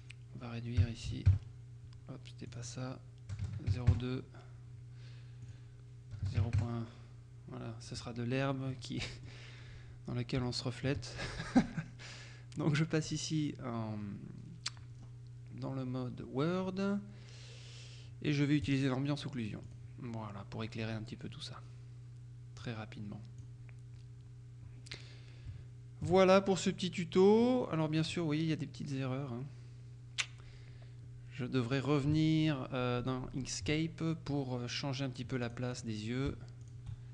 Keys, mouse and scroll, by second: 0.9 KP_Decimal, 1.1 KP_8, 1.3 KP_Enter, 3.4 KP_0, 3.5 KP_Decimal, 3.7 KP_2, 3.9 KP_Enter, 5.5 click, 6.2 KP_0, 6.3 KP_Decimal, 6.5 KP_1, 6.6 KP_Enter, 8.8 click, 9.7-10.2 scroll up 2, 10.5 shift+click, 10.6 shift+middle click, 13.1 click, 15.0-15.6 scroll down 2, 15.6-18.7 scroll down 1, 18.7 click, 19.7 click, 20.3-21.2 scroll up 3, 22.7-23.9 drag, 25.6 shift+middle click, 26.4 shift+click, 26.5-27.2 shift+scroll up 3, 27.5-28.6 drag, 33.8 Tab, 34.8 right click, 35.5 click, 36.7 shift+click.